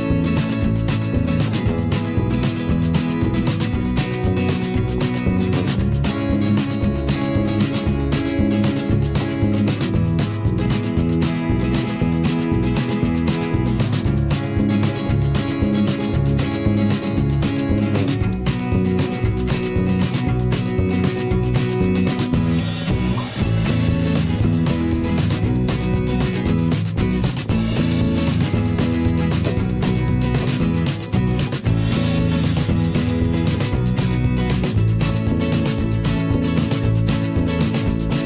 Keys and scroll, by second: 1.5 v, 1.8 /, 6.6 p, 9.2 v, 13.9 p, 16.8 v, 21.7 a, 24.8 v, 29.8 a, 36.1 ctrl+z, 37.0 v.